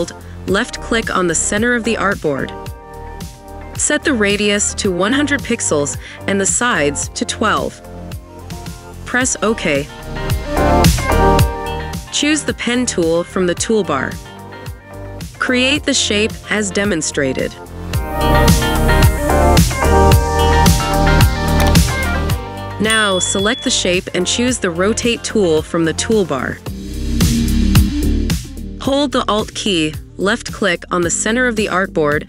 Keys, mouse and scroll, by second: 3.8-4.8 typing, 6.2 Tab, 6.8-8.0 typing, 11.3 double click, 24.0 double click, 31.6 alt+click.